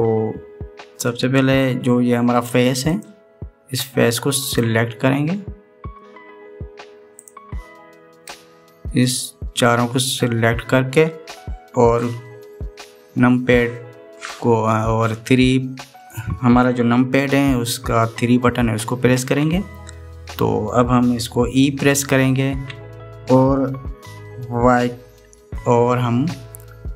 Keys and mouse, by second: 3.8 click, 5.3 click, 7.9 click, 9.0 click, 19.9 KP_3, 23.4 e.